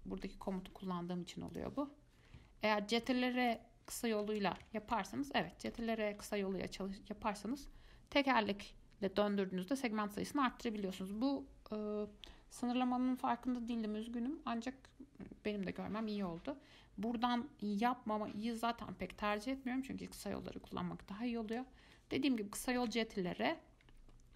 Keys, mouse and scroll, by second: 1.7 click, 3.2 ctrl+r, 5.0 ctrl+z, 5.9 ctrl+r, 23.0 ctrl+r.